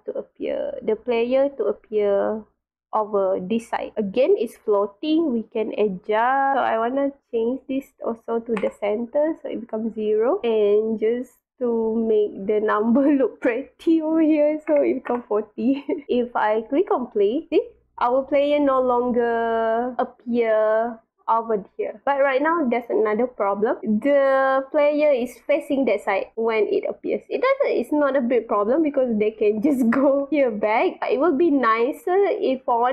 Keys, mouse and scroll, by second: 0.2-1.4 drag, 1.8-2.5 right drag, 3.5-4.0 drag, 7.0 click, 9.8 click, 10.2 click, 10.9 click, 11.3 click, 13.1 click, 17.2 click, 17.5-18.1 drag, 19.8 drag, 22.0-22.5 drag, 22.8-23.6 drag, 26.3-31.7 drag, 27.2 w, 28.2 w, 30.2 space, 32.0-32.6 drag, 32.6-32.9 typing, 32.7-32.9 drag.